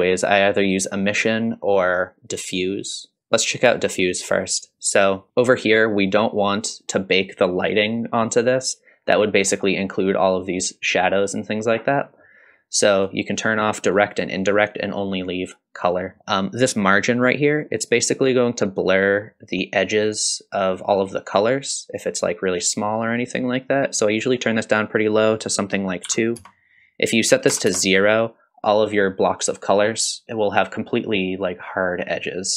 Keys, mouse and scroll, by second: 3.2-5.6 scroll down 1, 7.3-9.5 middle drag, 13.0 click, 14.3 click, 24.9-28.3 drag, 30.0 click, 30.2 Tab.